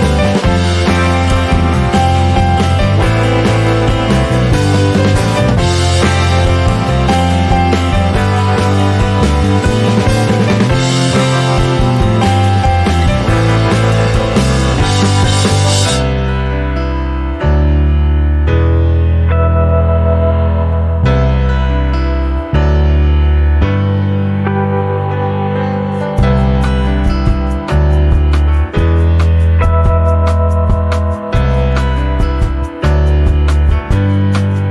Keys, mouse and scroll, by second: 0.3 shift+scroll up 1, 0.5 click, 0.9-1.9 middle drag, 1.9 click, 3.0 click, 3.4-5.7 middle drag, 5.7 click, 6.2-7.3 shift+middle drag, 7.3 click, 8.6 click, 10.2 middle click, 10.8 click, 12.1 click, 14.0 middle click, 14.6 click, 15.0-16.3 middle drag, 16.3 click, 18.0 middle click, 18.6 click, 19.3 middle click, 20.0-21.4 drag, 22.5-24.1 middle drag, 24.1 click, 24.5 middle click, 25.3 click, 27.0-28.4 middle drag, 28.4 click, 29.5 click, 31.6-33.1 middle drag, 33.1 click, 33.6-34.7 middle drag.